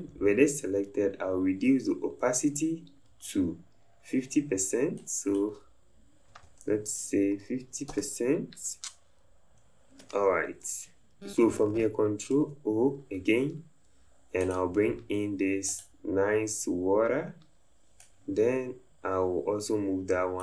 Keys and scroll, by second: 6.3 KP_5, 6.6 KP_0, 7.9 Return.